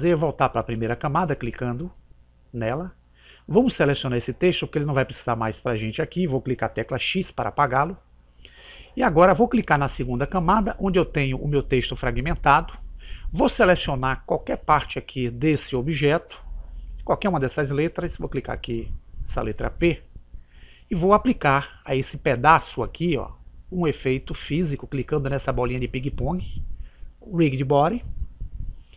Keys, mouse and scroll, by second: 1.9 click, 4.7-6.5 right drag, 7.1 x, 10.6 click, 18.8-20.5 right drag, 23.9 click, 28.0 click.